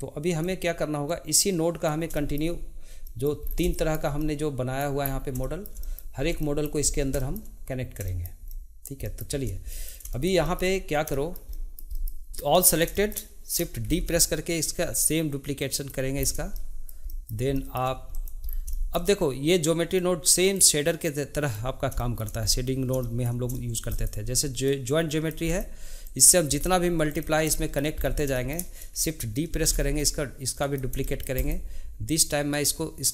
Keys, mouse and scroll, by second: 2.1-3.4 shift+middle drag, 3.4 scroll down 1, 3.7-5.0 shift+middle drag, 5.0-5.4 scroll up 2, 5.4 shift+middle click, 6.1 scroll up 1, 6.4 shift+middle click, 6.8 scroll up 2, 7.1-12.3 shift+middle drag, 12.3-12.9 drag, 12.9 shift+middle click, 13.8 shift+d, 16.5-18.1 shift+middle drag, 18.1 click, 18.5 scroll down 2, 18.7-19.6 shift+middle drag, 19.6-22.0 drag, 22.0 shift+middle click, 22.5-23.0 scroll up 2, 23.0 shift+middle click, 23.9-26.2 drag, 26.5 click, 27.1 click, 27.5-28.0 shift+middle drag, 28.0 scroll down 2, 28.3-29.5 shift+middle drag, 29.5 shift+d, 31.0-31.4 shift+middle drag, 31.4-32.6 drag.